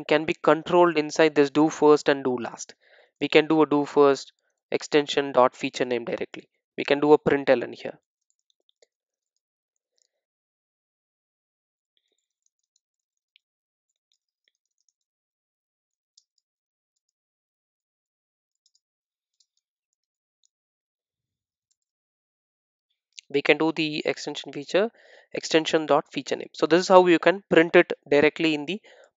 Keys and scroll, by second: 2.6 super+c, 5.6 super+v, 5.6 Return, 21.8 alt+Return.